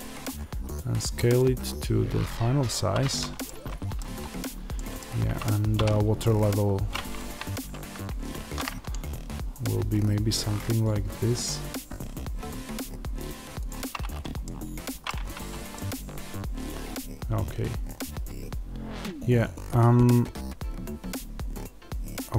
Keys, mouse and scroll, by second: 3.3 middle click, 4.1-4.6 scroll, 4.6 middle click, 5.6 e, 13.5 click, 14.3 middle click, 15.1 Tab, 15.3-15.6 scroll down 1, 15.6 middle click.